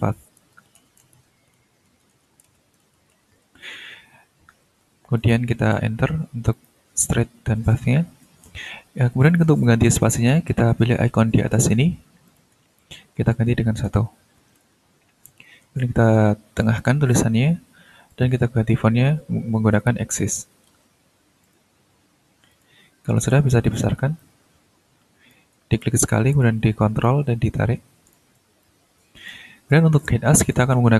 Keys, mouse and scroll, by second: 0.0-3.7 typing, 5.1 click, 5.7 Return, 6.5 click, 6.7 Return, 7.0-8.6 scroll down 5, 9.2 click, 12.2 ctrl+click, 13.1 ctrl+1, 13.8 Return, 14.8-15.1 ctrl+scroll up 2, 16.6 click, 18.1 ctrl+click, 18.4 ctrl+a, 20.3 a, 20.7 x, 21.4 click, 22.5 click, 23.0 scroll up 3, 23.3 shift+scroll down 2, 24.2-25.5 ctrl+drag, 27.0-28.3 ctrl+drag, 28.6 ctrl+click, 29.7 click, 30.4 click, 30.8 t.